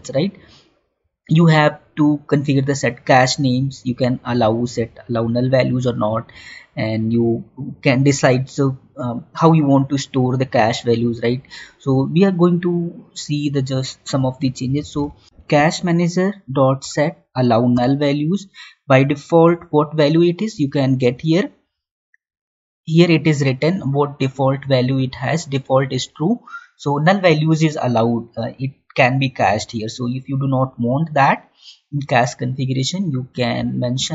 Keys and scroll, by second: 16.7 Down.